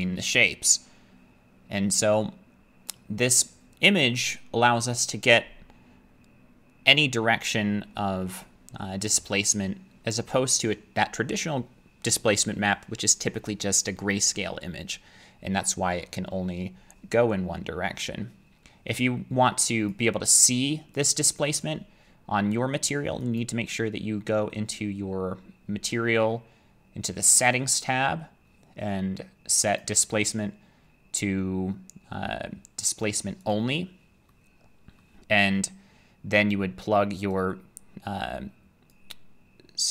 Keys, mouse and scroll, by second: 2.9 click, 19.9 click, 21.0 click, 21.3 click, 23.4 click, 27.5 click, 33.5 click, 35.0 middle click, 38.9 click.